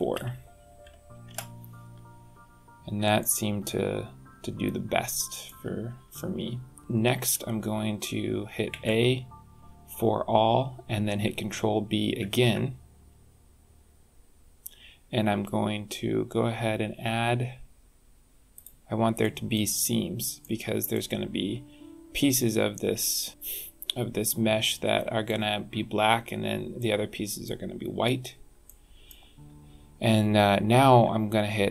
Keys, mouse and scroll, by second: 3.2 middle click, 5.8-6.8 scroll up 4, 6.8 scroll down 2, 8.7 a, 12.2 ctrl+b, 19.2 middle click, 20.4 middle click, 23.3 middle click, 26.7 middle click, 27.9-28.3 scroll up 2, 28.6 shift+middle click, 30.2 scroll up 1, 30.8 scroll down 1.